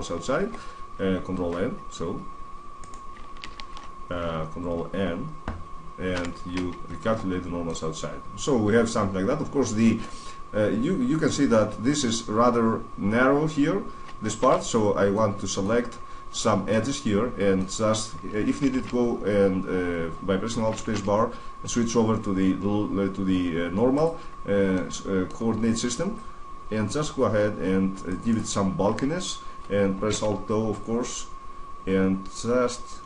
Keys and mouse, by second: 3.1 right click, 3.3 ctrl+z, 3.5 click, 5.9 ctrl+n, 6.9 Tab, 10.5-12.3 middle drag, 14.2 Tab, 14.9-18.2 middle drag, 18.5 alt+space, 20.5 alt+space, 24.5-25.9 middle drag, 25.9-27.7 drag, 29.9 alt+o, 30.6-32.5 drag.